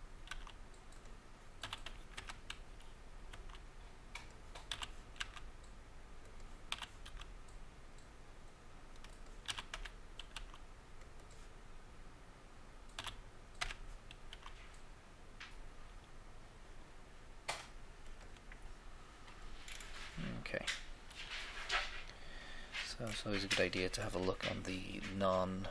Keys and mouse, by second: 0.2 s, 0.4 s, 1.6 e, 2.1 Escape, 3.4 s, 4.6 e, 4.8 e, 5.2 x, 6.7 e, 7.1 x, 9.4 e, 9.6 e, 9.7 Escape, 10.4 s, 13.0 e, 13.6 Escape, 14.2 s, 14.4 s, 18.7-20.5 middle drag.